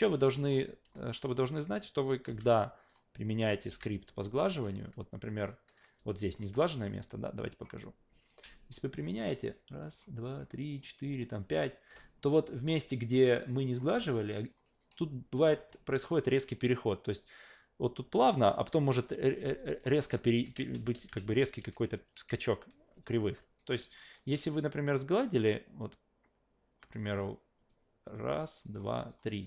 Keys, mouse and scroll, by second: 0.4 click, 1.0 alt+middle click, 1.7 click, 2.3 f, 2.9 click, 3.3 click, 3.6 f, 4.3 click, 4.6 alt+middle click, 4.9-5.5 alt+right drag, 6.1 alt+middle click, 7.0-7.6 drag, 9.4 click, 9.8 click, 10.2 click, 10.6 click, 11.1 click, 12.0 alt+middle click, 12.5 alt+middle click, 13.1-13.8 drag, 13.9 f, 14.5 click, 14.8 alt+right click, 15.7 alt+middle click, 19.5-19.8 alt+right drag, 20.0 alt+middle click, 20.3 ctrl+z, 20.5 ctrl+z, 20.7 ctrl+z, 20.9 ctrl+z, 21.2 ctrl+z, 21.6 ctrl+z, 21.9 ctrl+z, 22.3 ctrl+z, 23.1 alt+right click, 23.8 alt+middle click, 24.7-26.8 drag, 28.0 click, 28.6 click, 29.1 click.